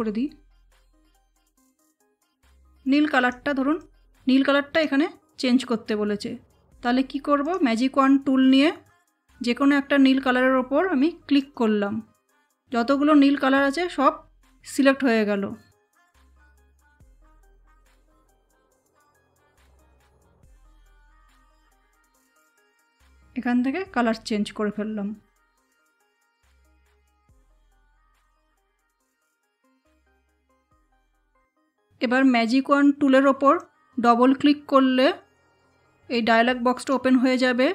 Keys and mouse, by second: 3.1 click, 7.4 click, 11.3 click, 17.4 click, 21.3 click, 26.0 space, 29.6 ctrl+z, 33.5-37.7 drag.